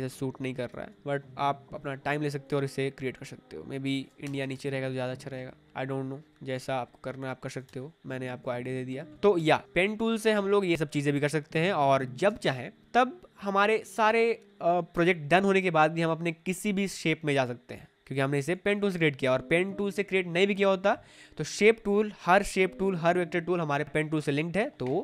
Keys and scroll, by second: 4.1 Return, 4.5 Escape, 7.6 Return, 8.9 Down, 9.1 Left, 9.3 BackSpace, 10.7 space, 10.8 Escape, 12.2 space.